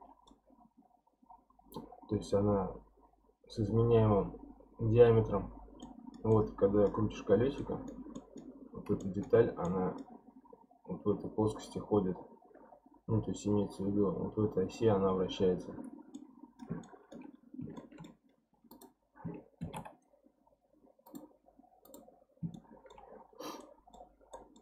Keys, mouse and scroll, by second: 0.5-1.3 scroll down 1, 1.3-3.6 scroll down 1, 5.8-8.5 middle drag, 8.5-9.0 scroll down 1, 9.0-9.5 shift+middle drag, 9.5 scroll down 1, 9.7-12.7 middle drag, 16.1-17.3 middle drag, 17.3-17.8 scroll up 1, 17.8-18.7 shift+middle drag, 18.7 click, 19.6 shift+s, 21.8 click, 22.2-22.5 scroll down 4, 22.5-23.2 shift+middle drag, 23.2-23.6 scroll up 3, 23.6-24.1 middle drag, 24.1 scroll down 1, 24.3-24.6 middle drag.